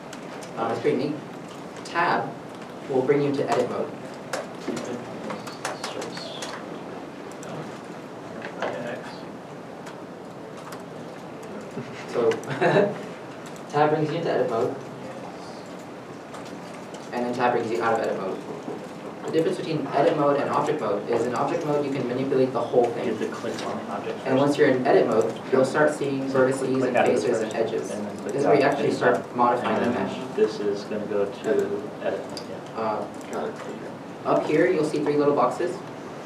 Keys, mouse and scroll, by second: 2.6 Tab, 12.1 Tab, 13.5 Tab, 16.1 a, 17.9 Tab, 18.5 middle click, 21.7 g, 23.3 right click, 25.0 Tab, 26.0 middle click, 30.5 middle click.